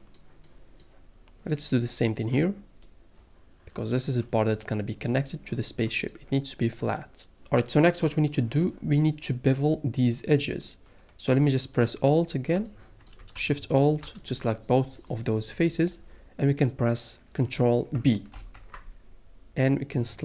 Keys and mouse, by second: 2.8-3.9 drag, 13.7 alt+shift+click, 18.3 ctrl+b.